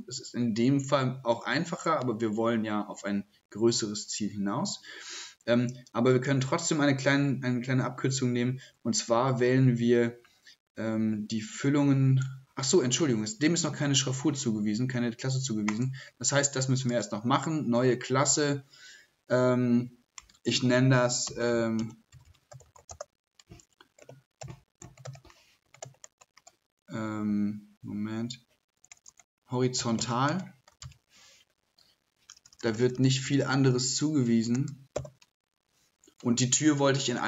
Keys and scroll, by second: 20.3-23.3 typing, 34.7-35.0 typing.